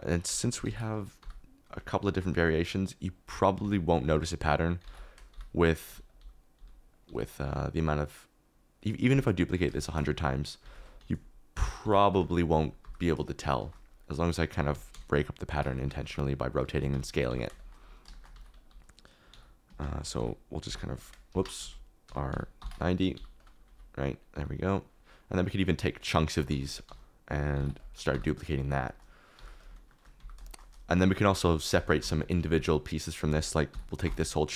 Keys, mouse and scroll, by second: 0.2 r, 0.6 9, 0.9 0, 1.2 g, 3.6 alt+d, 4.0-7.0 typing, 7.7 click, 9.1 g, 10.6 alt+d, 11.0 r, 11.8 9, 11.8 0, 12.8 g, 14.5 alt+d, 14.9-17.2 typing, 18.3 alt+d, 19.3-20.6 typing, 19.6 Escape, 20.9 click, 21.3 Escape, 21.6 ctrl+z, 22.0-24.3 typing, 23.4 click, 24.1 click, 24.7 click, 25.5 shift+click, 26.5 alt+d, 26.8 r, 27.5 9, 27.7 0, 28.1 g, 29.3 g, 29.6 click, 29.9 shift+middle click, 30.1 g, 31.8 shift+click, 32.1 Tab, 32.2 1, 32.4 alt+z, 33.7 ctrl+;, 34.0 ctrl+l.